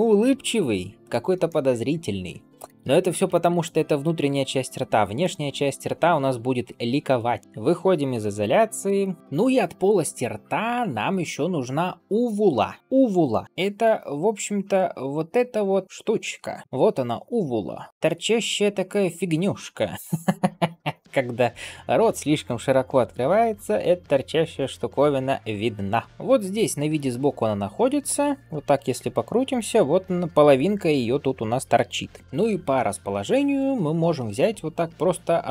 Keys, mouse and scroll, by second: 0.6 ctrl+s, 1.4-2.5 middle drag, 3.0 alt+shift+z, 3.2 shift+middle click, 3.9 Tab, 4.5 ctrl+s, 5.1-7.4 middle drag, 7.4 ctrl+s, 8.8 KP_Divide, 9.2 middle click.